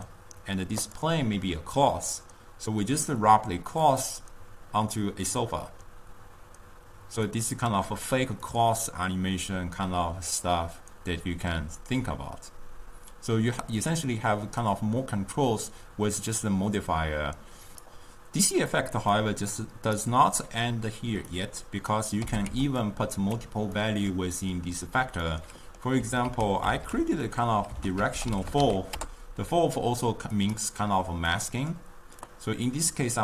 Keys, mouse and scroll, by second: 0.9 click, 3.1-6.2 drag, 8.6-11.6 drag, 19.3 click, 20.3-21.6 middle drag, 21.6-22.3 drag, 22.3 g, 23.8-26.3 middle drag, 26.3 ctrl+a, 31.5-32.4 middle drag, 32.4 click.